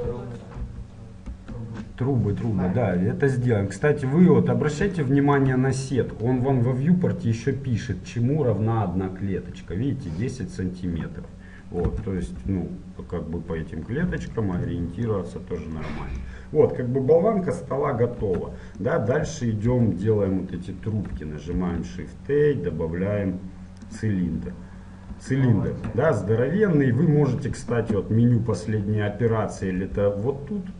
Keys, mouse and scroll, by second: 0.7 KP_1, 1.4 KP_3, 2.3-12.1 middle drag, 12.1 s, 14.9-18.5 middle drag, 18.5 Tab, 18.9-24.1 middle drag, 19.8 KP_1, 24.1 shift+a, 24.9-27.7 middle drag, 30.1 t.